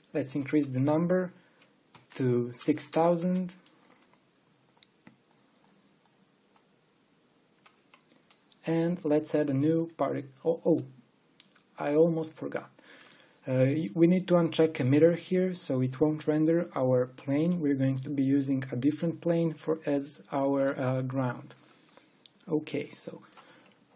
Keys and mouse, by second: 3.4 KP_0, 3.6 KP_0.